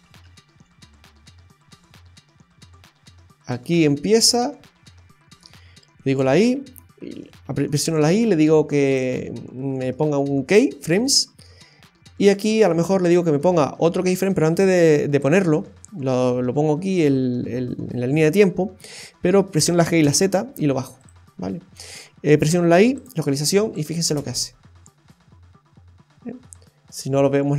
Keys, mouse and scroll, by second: 0.2-0.6 Right, 0.7 Right, 0.9 Right, 3.9 Left, 6.0 i, 11.0 space, 12.2 space, 22.4 i, 23.7 click, 24.0 space, 26.2-26.5 scroll down 1, 26.5 middle click.